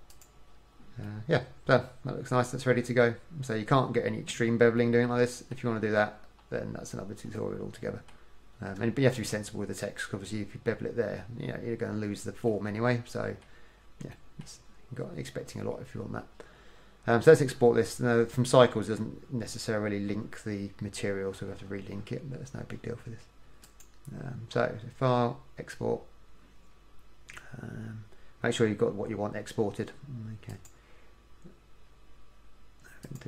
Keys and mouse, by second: 1.4 middle click, 2.7-5.0 middle drag, 12.7-17.8 middle drag, 23.4-25.0 middle drag.